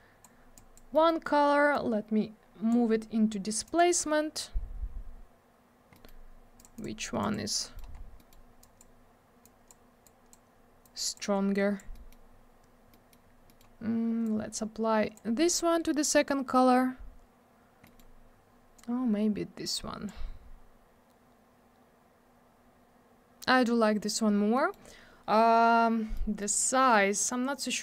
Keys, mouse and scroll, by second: 0.5 click, 0.9 middle click, 1.0 middle click, 1.7 click, 3.6 click, 3.7 click, 5.9 middle click, 6.0 middle click, 6.5 click, 6.6 click, 6.7 click, 6.8 double click, 7.2 click, 7.3 click, 7.6 middle click, 7.7 double middle click, 8.0 scroll down 1, 8.1 middle click, 8.3 middle click, 8.6 click, 8.8 double click, 9.4 click, 10.0 click, 10.8 click, 11.5 click, 11.9 middle click, 12.1 middle click, 12.3 scroll up 1, 12.9 middle click, 13.3 scroll down 1, 13.5 middle click, 13.5 middle click, 14.2 click, 17.8 middle click, 17.9 middle click, 18.7 click, 24.5 middle click, 24.7 middle click, 26.1 middle click, 26.6 middle click, 27.2 click.